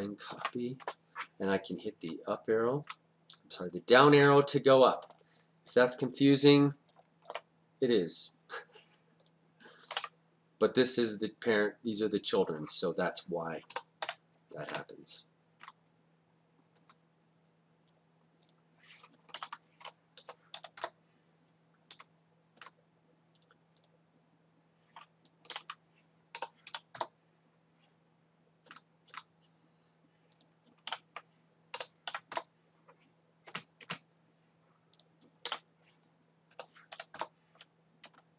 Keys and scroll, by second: 0.4 ctrl+c, 0.9 Return, 2.1 Up, 2.9 Down, 10.0 ctrl+v, 13.8 BackSpace, 14.1 2, 14.7 Return, 15.7 Down, 19.4 ctrl+v, 20.2 BackSpace, 20.6 3, 20.8 Return, 22.0 Down, 25.5 ctrl+v, 26.4 BackSpace, 26.7 4, 27.0 Return, 28.7 Down, 30.9 ctrl+v, 31.8 BackSpace, 32.1 5, 32.4 Return, 33.5 Down, 35.5 ctrl+v, 36.6 BackSpace, 37.0 6, 37.2 Return.